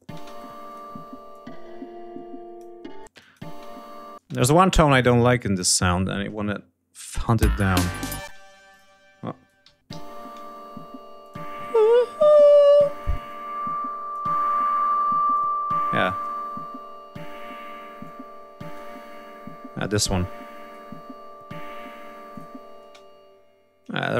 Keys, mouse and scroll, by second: 0.4 click, 1.1-2.5 ctrl+drag, 2.8 space, 2.9 click, 4.0 space, 4.1 click, 4.6 click, 22.1 click, 22.9 space.